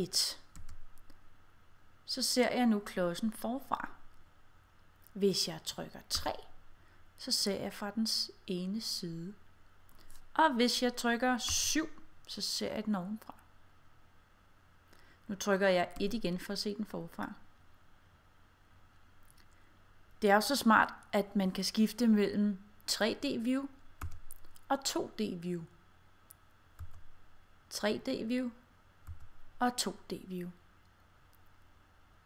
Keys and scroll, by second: 0.7 1, 6.2 3, 11.6 7, 16.1 1, 24.1 5, 26.8 5, 29.2 5.